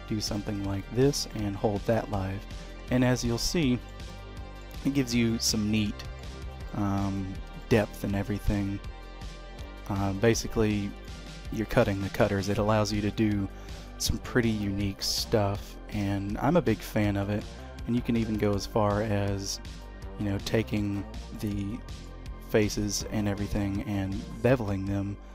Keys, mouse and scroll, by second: 1.3 middle click, 3.6 shift+middle click, 4.1 middle click, 4.9-5.5 scroll down 2, 5.2 middle click, 6.3-7.0 scroll down 2, 6.7 middle click, 7.2-7.6 scroll up 2, 7.6 shift+middle click, 8.2 s, 11.2 middle click, 12.4 middle click, 17.7 Tab, 18.4 click, 19.6 2, 19.7 click, 20.7 3, 20.8 click, 21.3 middle click, 22.2-22.5 scroll up 1, 23.5 ctrl+b.